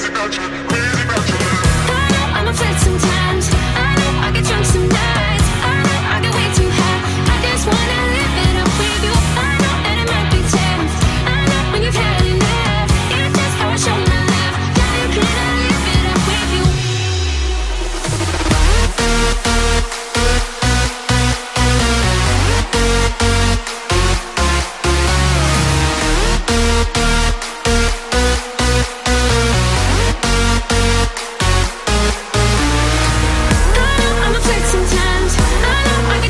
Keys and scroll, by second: 12.8 ctrl+i, 14.1 b, 15.0 ], 16.0 ], 25.2 ], 26.1 [, 30.4 [, 31.3 [, 31.5 [.